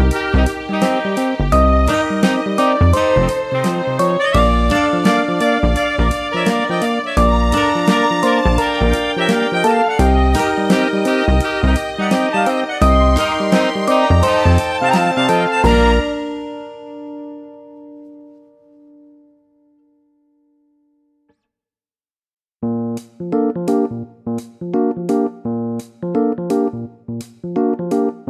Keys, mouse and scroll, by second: 3.4 click, 4.2 click, 7.9 shift+click, 10.8 shift+click, 10.9 click, 12.4 click, 16.6 click, 16.8 double click, 19.8 click, 26.7 click.